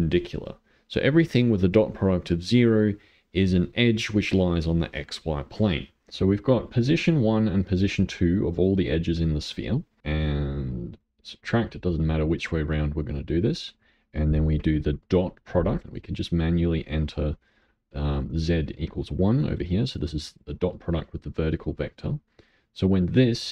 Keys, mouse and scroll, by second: 6.1-6.5 scroll up 4, 7.2-8.9 drag, 10.2 click, 12.1 middle click, 13.0 click, 16.8-18.2 drag, 19.9 click, 21.9 middle click, 22.5 click.